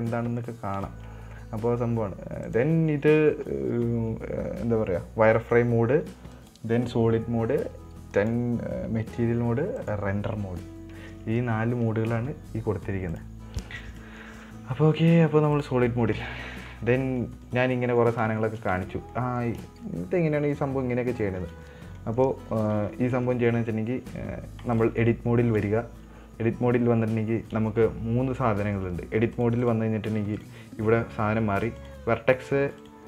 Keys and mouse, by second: 0.4 middle click, 1.3 Tab, 2.9 click, 6.8 click, 8.6 click, 10.3 click, 13.6 click, 14.4 middle click, 15.9 click, 16.9 middle click, 17.5 middle click, 17.9 right click, 18.1 middle click, 18.8 shift+middle click, 19.1 Tab, 19.6 middle click, 20.1 shift+middle click, 20.4 middle click, 20.9 right click, 21.6 click, 21.9 Tab, 22.4 middle drag, 22.9 middle click, 23.4 middle click, 25.1 click, 27.2 middle click, 29.7 click, 30.0-30.9 drag, 32.2 click.